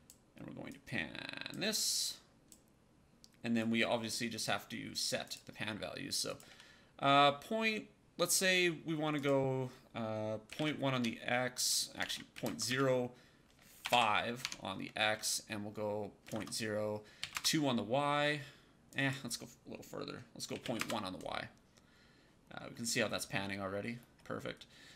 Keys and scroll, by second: 10.5 KP_1, 10.8 Tab, 11.9 shift+Tab, 12.4 KP_0, 12.6 KP_1, 13.7 BackSpace, 13.8 KP_5, 14.3 Tab, 16.2 KP_0, 17.1 KP_2, 17.2 Return, 20.5 KP_1, 20.7 Return.